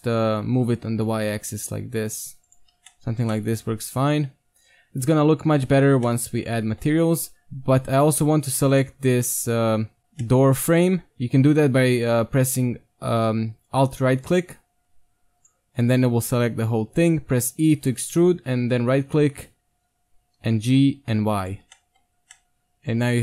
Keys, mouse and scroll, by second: 0.2 z, 0.5 g, 2.7 z, 2.9 middle click, 3.2 Tab, 4.3 middle click, 4.5 middle click, 4.6 middle click, 4.8 middle click, 5.0 middle click, 5.2 Tab, 8.0-10.0 right drag, 10.2-12.6 middle drag, 14.3-17.2 right drag, 17.4 e, 18.3 KP_3, 19.5 z, 19.9-21.6 middle drag, 20.3 g, 21.6 z, 22.0 Tab.